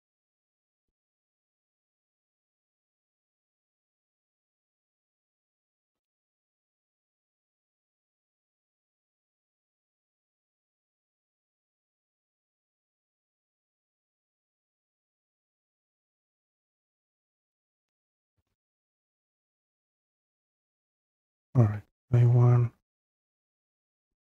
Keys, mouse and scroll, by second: 1.7 click, 1.8 click, 2.7-3.3 scroll down 2, 5.2 scroll, 7.5 click, 7.5 scroll down 3, 16.5 click, 17.5-18.3 typing, 19.6 click, 21.1-21.5 scroll, 21.6-22.6 scroll down 4, 22.6-24.3 scroll down 5.